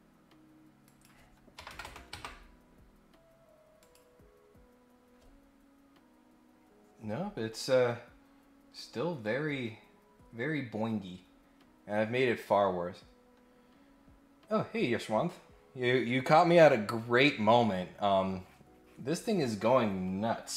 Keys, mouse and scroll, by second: 0.8 click, 3.8 click, 13.4-14.0 scroll up 3.